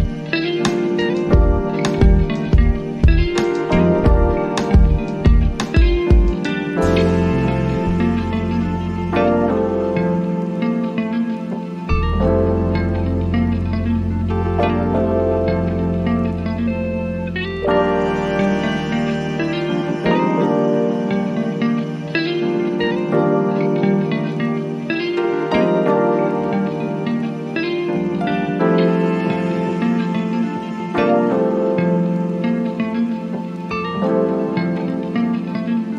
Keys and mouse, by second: 0.8 click, 2.0 click, 4.1 right click, 7.4 click, 9.5 right click, 10.7-16.0 drag, 18.8-23.4 drag, 27.6 click, 33.4 click, 33.6 click.